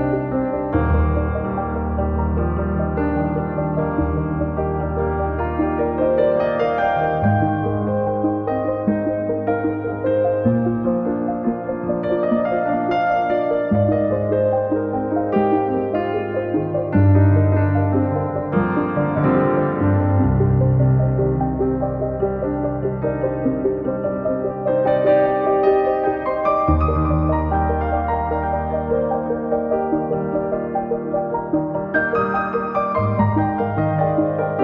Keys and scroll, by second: 0.7 space, 2.5 space, 14.2 Escape, 15.1 m, 19.0 s, 21.9 space, 31.6 Escape, 33.7 space.